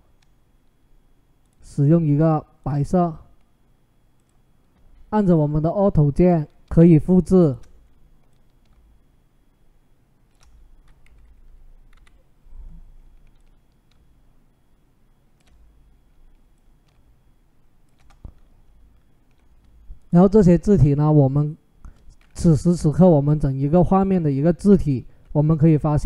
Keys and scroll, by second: 10.8 Up, 11.0 Up, 11.2 Up, 11.7 Down.